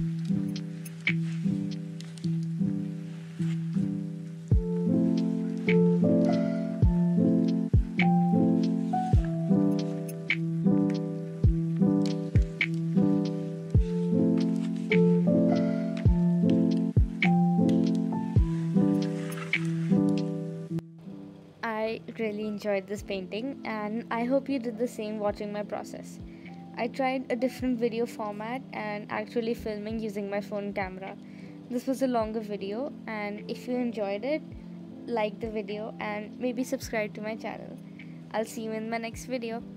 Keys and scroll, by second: 0.3 space, 2.5 space, 4.0 space, 6.7 space, 6.9 space, 8.5 space, 9.4 space, 9.7 space, 9.9 space, 13.9 scroll, 14.3 space, 14.7 space, 15.1 space, 15.3 space, 18.0 space, 18.7 z, 19.1 space, 19.5 space, 22.1 space, 22.4 space, 22.7 space, 23.8 space, 24.2 z, 24.7 space, 25.1 scroll, 25.8 space, 26.5 space, 26.8 ctrl+z, 27.2 ctrl+z, 28.1 ctrl+z, 30.3 space, 30.5 space, 31.0 ctrl+z, 33.2 ctrl+z, 33.7 space, 33.9 space, 34.7 ctrl+z, 37.1 space, 37.7 ctrl+z, 39.1 ctrl+z.